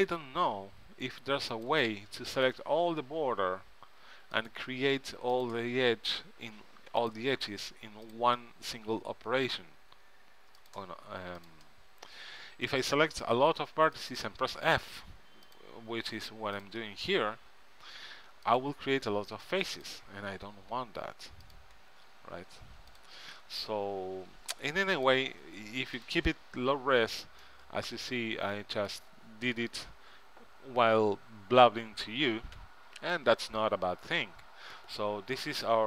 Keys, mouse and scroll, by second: 0.8 f, 3.3 f, 6.3 f, 9.0 f, 12.4 f, 14.8 f, 17.5 f, 20.8 f, 22.0-28.0 middle drag, 23.9 f, 26.9 f, 32.8 Tab, 34.0 middle click, 34.4 middle click, 34.6 middle click.